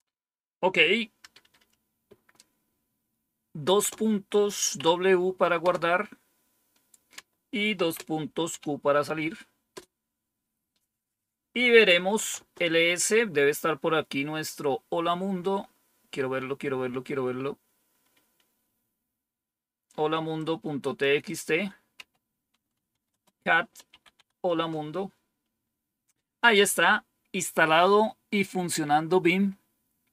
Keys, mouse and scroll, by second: 0.9-2.0 typing, 3.3-6.0 typing, 7.4-8.9 typing, 11.8-12.8 typing, 20.3 click, 21.2 click, 21.9-24.3 typing, 24.4 Return, 28.6-29.3 scroll down 1, 29.3 scroll down 1, 29.9 scroll down 1.